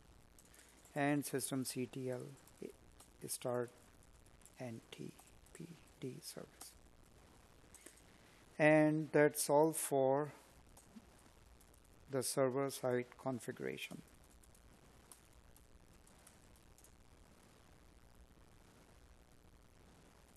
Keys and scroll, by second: 0.9 space, 3.6 space, 5.2 space.